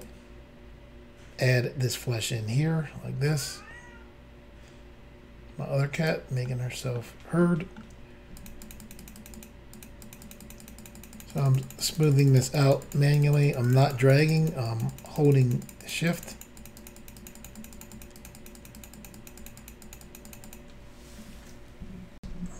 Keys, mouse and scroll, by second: 0.0 click, 6.4 middle click, 7.4 middle click, 8.4 shift+click, 8.6 shift+click, 8.7 shift+double click, 8.8 shift+click, 8.9 shift+click, 9.0 shift+click, 9.1 shift+double click, 9.2 shift+click, 9.4 shift+click, 9.4 shift+double click, 9.7 shift+click, 9.8 shift+click, 10.0 shift+click, 10.1 shift+double click, 10.2 shift+click, 10.3 shift+click, 10.4 shift+click, 10.5 shift+double click, 10.6 shift+click, 10.7 shift+click, 10.8 shift+click, 10.9 shift+double click, 11.0 shift+click, 11.0 shift+click, 11.1 shift+click, 11.2 shift+double click, 11.3 shift+click, 11.4 shift+click, 11.5 shift+click, 11.5 shift+double click, 11.6 shift+click, 11.7 shift+click, 11.8 shift+click, 11.9 shift+double click, 12.0 shift+click, 12.0 shift+click, 12.1 shift+click, 12.2 shift+double click, 12.3 shift+click, 12.4 shift+click, 12.5 shift+click, 12.6 shift+double click, 12.6 shift+click, 12.7 shift+click, 12.8 shift+click, 12.9 shift+double click, 13.1 shift+click, 13.1 shift+click, 13.2 shift+click, 13.3 shift+double click, 13.4 shift+click, 13.5 shift+click, 13.6 shift+click, 13.7 shift+double click, 13.8 shift+click, 13.9 shift+click, 14.0 shift+click, 14.1 shift+double click, 14.2 shift+click, 14.3 shift+click, 14.4 shift+click, 14.5 shift+double click, 14.7 shift+click, 14.8 shift+click, 14.9 shift+click, 15.0 shift+double click, 15.1 shift+click, 15.2 shift+click, 15.3 shift+click, 15.3 shift+double click, 15.4 shift+click, 15.5 shift+click, 15.6 shift+click, 15.7 shift+double click, 15.8 shift+click, 15.9 shift+click, 16.0 shift+click, 16.1 shift+double click, 16.1 shift+click, 16.2 shift+click, 16.3 shift+click, 16.4 shift+double click, 16.6 shift+click, 16.7 shift+click, 16.8 shift+click, 16.9 shift+double click, 17.0 shift+click, 17.1 shift+click, 17.2 shift+click, 17.3 shift+double click, 17.4 shift+click, 17.5 shift+click, 17.6 shift+click, 17.6 shift+double click, 17.7 shift+click, 17.8 shift+click, 17.9 shift+click, 18.0 shift+double click, 18.2 shift+click, 18.3 shift+click, 18.4 shift+click, 18.5 shift+double click, 18.6 shift+click, 18.7 shift+click, 18.8 shift+click, 18.8 shift+double click, 18.9 shift+click, 19.1 shift+click, 19.2 shift+click, 19.3 shift+double click, 19.4 shift+click, 19.5 shift+click, 19.6 shift+click, 19.7 shift+double click, 19.8 shift+click, 19.9 shift+click, 20.0 shift+click, 20.2 shift+double click, 20.3 shift+click, 20.3 shift+click, 20.5 shift+click, 20.5 shift+double click, 22.2 Insert.